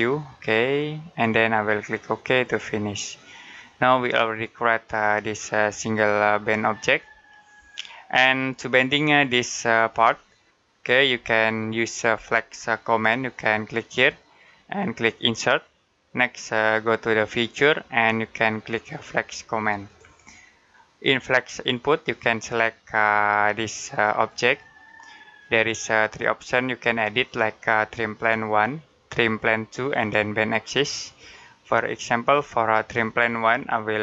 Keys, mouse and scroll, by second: 0.3 middle click, 3.4 middle click, 10.0 scroll down 1, 19.7 scroll down 1, 19.9 click, 24.0 click, 25.4 middle click, 32.2 click, 33.1-34.0 scroll down 1.